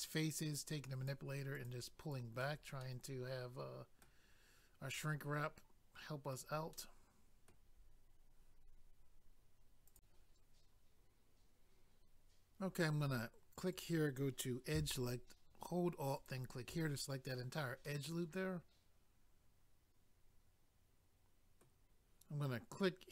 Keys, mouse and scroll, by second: 0.5 click, 1.5 click, 1.7 click, 2.1 click, 2.8 middle click, 5.0 middle click, 6.7 middle click, 9.9 click, 10.0 click, 13.7 click, 13.8 click, 16.2 alt+click, 16.3 alt+click, 17.2-17.9 scroll down 1, 17.9 middle click.